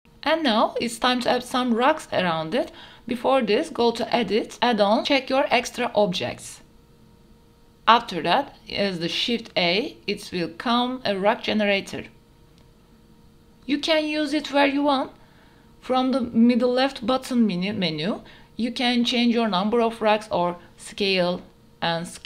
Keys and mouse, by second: 0.7-1.8 drag, 10.0 shift+a, 13.7 shift+drag, 14.4 KP_Decimal, 15.2 middle click, 19.3 middle click, 20.5 middle click.